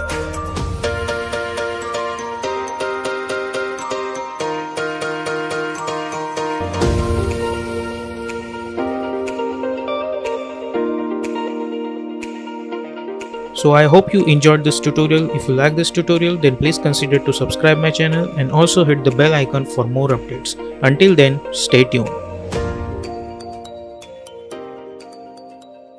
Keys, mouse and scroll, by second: 1.0 space, 1.7 click, 6.2 `.